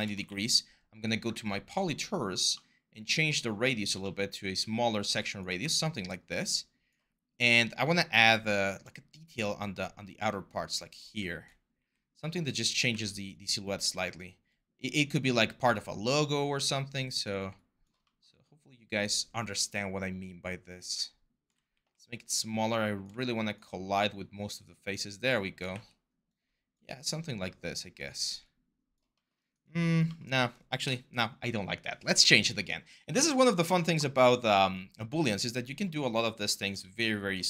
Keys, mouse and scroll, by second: 0.1 ctrl+a, 5.4 w, 11.5 r, 12.7 w, 21.5 r, 25.5 w, 30.6 Delete.